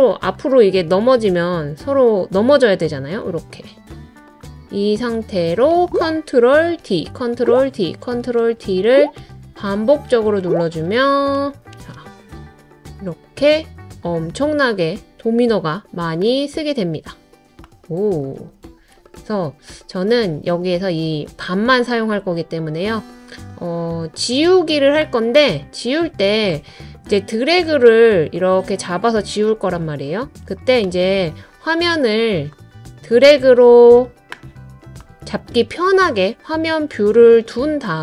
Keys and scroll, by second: 6.8 super+d, 7.4 super+d, 7.9 super+d.